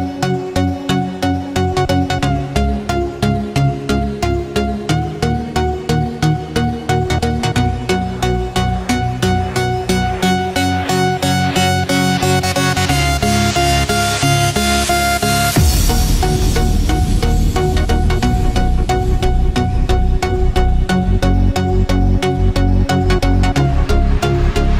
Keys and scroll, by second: 0.3 ctrl+-, 3.5 ctrl+=, 9.6 ctrl+f, 10.0 ctrl+d, 16.7 ctrl+f, 17.0 ctrl+d, 23.5 ctrl+f, 23.8 ctrl+d.